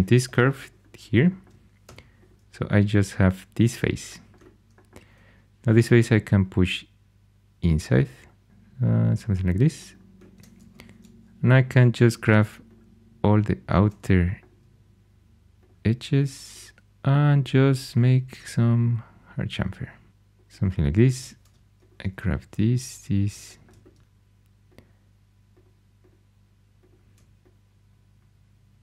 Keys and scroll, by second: 0.2 shift+i, 1.8 3, 10.5 2, 21.0 2.